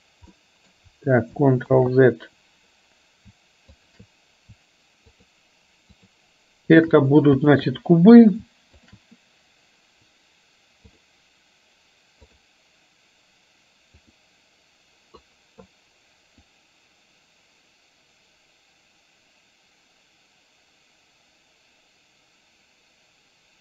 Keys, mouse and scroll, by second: 0.5 middle click, 1.8 ctrl+z, 3.8 shift+click, 5.1 shift+click, 6.0-6.5 shift+drag, 7.6 shift+drag, 11.1-12.5 drag, 14.6 click, 16.5-23.6 drag.